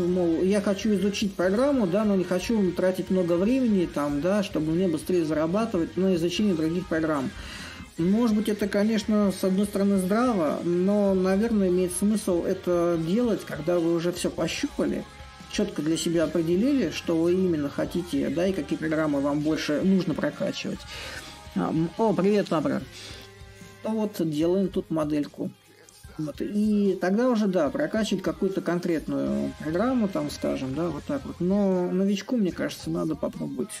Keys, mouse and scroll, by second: 0.0-5.0 drag, 6.6-9.0 drag, 9.0 s, 11.2-16.2 drag, 17.5-22.5 drag, 24.4-25.7 middle drag, 25.7-27.9 drag, 28.8 right click, 28.9 click, 29.0 right click, 29.1 click, 30.6-33.8 drag.